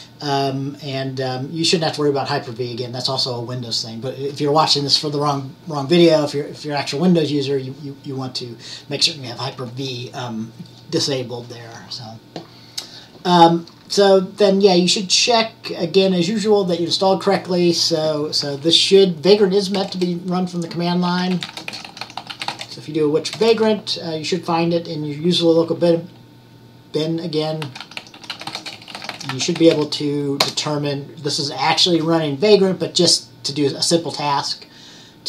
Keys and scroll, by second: 20.9-23.2 typing, 27.5-30.3 typing.